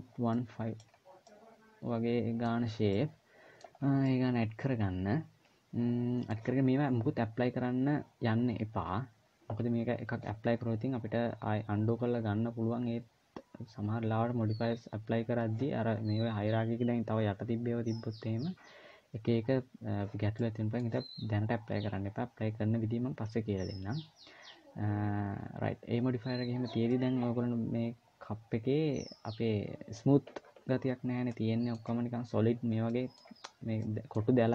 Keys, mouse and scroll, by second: 0.1 middle click, 0.7 scroll down 1, 1.0 middle click, 2.4-2.7 scroll up 2, 2.7 middle click, 3.5 scroll down 1, 3.8 middle click, 20.2 middle click, 26.7 middle click, 31.0 middle click, 32.6 scroll up 1, 32.7 middle click, 33.6 middle click.